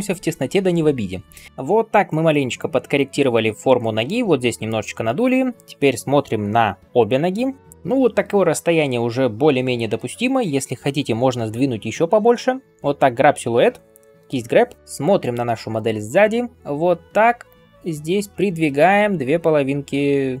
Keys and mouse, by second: 7.2 alt+b, 14.3-15.2 typing, 14.8 ctrl+KP_1, 14.8-20.4 right drag, 16.3-20.4 drag, 16.3-20.4 middle drag.